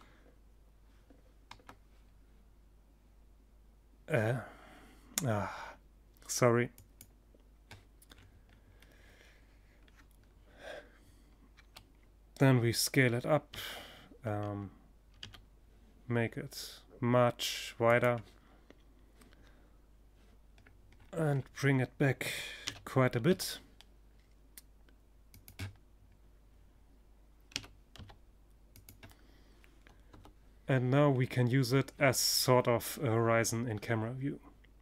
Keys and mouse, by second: 6.6-10.5 middle drag, 10.0 s, 10.5-11.9 drag, 16.5-18.4 drag, 19.1 click, 21.1 g, 21.9-23.9 middle drag, 23.9-26.6 drag, 26.0 g, 27.3-29.2 drag, 28.6 KP_0, 29.6 click, 31.1 middle click.